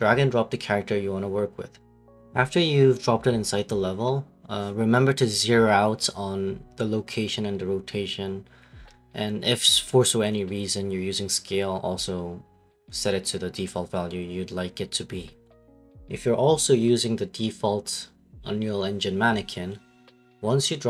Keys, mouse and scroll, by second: 7.5 right click, 9.0 w, 9.2 right click, 11.8 click, 12.3 click, 13.0 click, 13.9 right click, 14.6-15.6 scroll, 15.6 scroll, 18.8 right click.